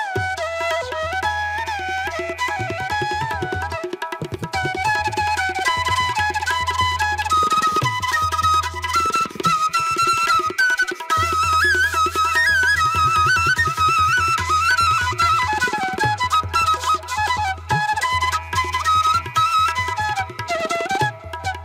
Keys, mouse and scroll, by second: 0.6 ctrl+=, 1.0 space, 1.9 ctrl+=, 2.3 space, 9.7 space, 10.4 ctrl+-, 12.7 space, 13.0 ], 13.5 ], 14.5 ctrl+-.